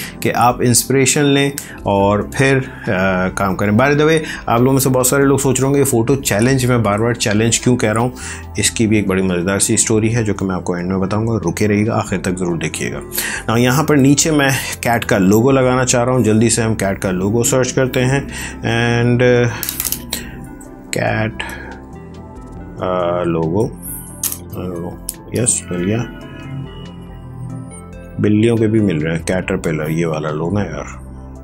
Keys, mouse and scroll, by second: 15.5 alt+Tab, 20.0-23.6 typing.